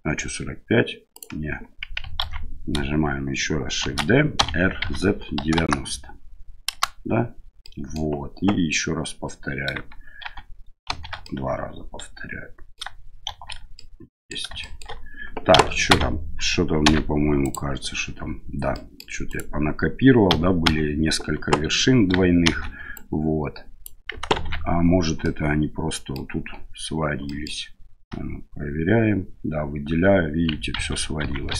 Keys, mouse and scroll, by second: 2.2 ctrl+z, 3.8 shift+d, 7.6 middle click, 10.2 shift+r, 10.9 shift+r, 11.3-12.7 middle drag, 13.3 shift+r, 13.8 middle click, 14.7 middle click, 15.5 a, 15.9 a, 16.8 m, 18.7 middle click, 19.3 right click, 20.3 a, 20.6 a, 22.4 shift+n, 22.9 right click, 24.3 ctrl+z, 25.2 middle click, 27.2 middle click, 28.1 l, 30.7 ctrl+z, 31.2 ctrl+z, 31.5 ctrl+z.